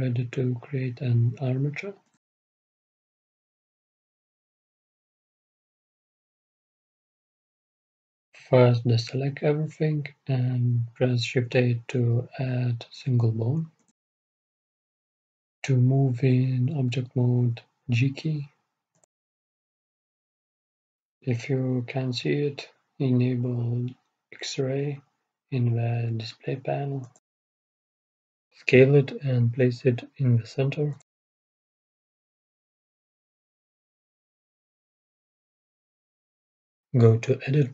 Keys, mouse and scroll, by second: 0.0 KP_3, 7.0 KP_1, 8.1 middle click, 8.6-10.0 scroll down 1, 9.2 a, 10.0-11.8 drag, 11.8 shift+a, 18.6 g, 23.3-27.9 drag, 27.9-29.8 middle drag, 28.6 s, 30.4 g, 33.5 g, 35.3 middle click.